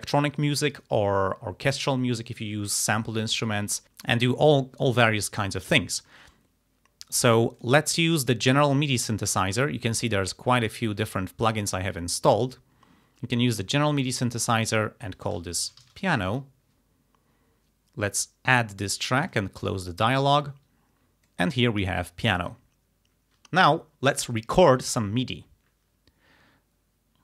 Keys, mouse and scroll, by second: 7.6 click, 13.6 click, 13.9 scroll up 1, 13.9 click, 14.7 click, 15.5-16.7 typing, 19.3 click, 21.3 click.